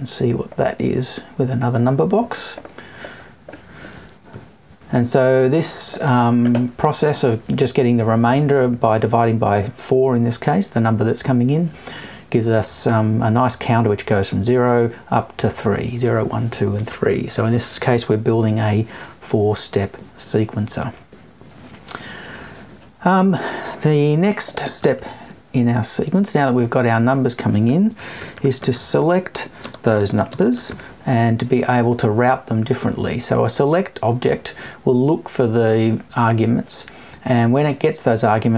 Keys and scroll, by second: 4.3 Left.